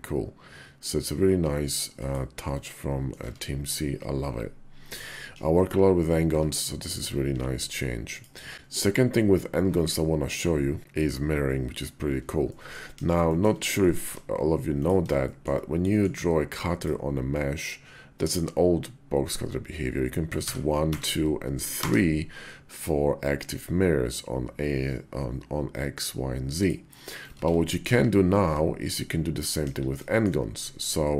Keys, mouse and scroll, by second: 2.4 click, 3.1 Tab, 5.5 /, 6.1 `, 7.0 x, 8.9 `, 8.9 x, 12.3 middle drag, 12.7 KP_5, 13.1 shift+middle drag, 13.6 middle click, 13.9 d, 15.0-15.3 shift+middle drag, 15.6 click, 17.2-26.5 drag, 27.2 ctrl+z, 27.5 drag, 28.2 `, 29.4 KP_5, 30.4 `.